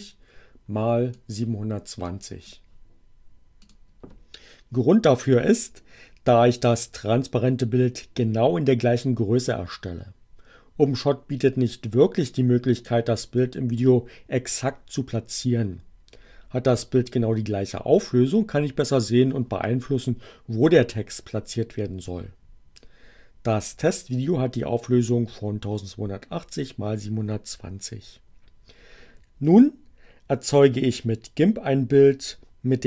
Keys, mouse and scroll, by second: 2.1 click, 3.6 click.